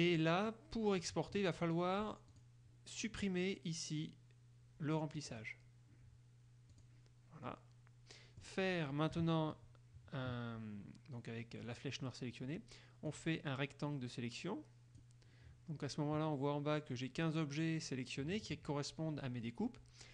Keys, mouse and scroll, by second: 0.3-0.6 scroll up 1, 0.6 middle click, 2.5 click, 5.5 click, 6.9 click, 7.7-8.8 middle drag, 9.3 KP_Subtract, 11.9 click, 13.3-15.3 drag.